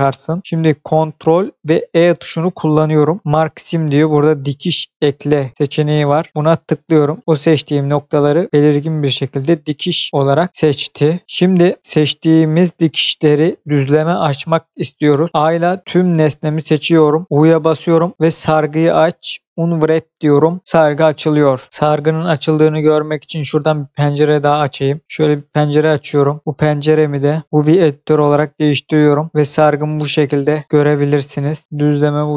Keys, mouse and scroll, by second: 1.9 ctrl+e, 6.1 click, 8.1 middle click, 15.4 a, 17.2 u, 19.8 click, 24.3 click, 27.2 click, 27.7 click, 29.2 scroll up 1, 29.5 scroll down 1, 30.6-31.1 scroll up 1, 31.6 scroll down 1, 31.8 middle click.